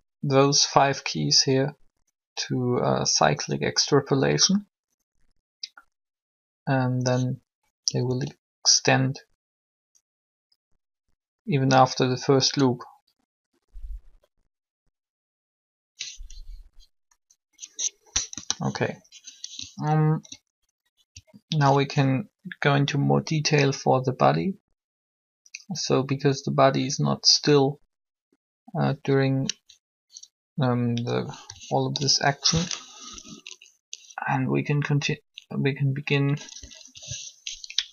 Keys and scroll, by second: 7.8 alt+a, 17.1 Escape, 18.0 3, 33.0 alt+shift+Up, 36.4 Down.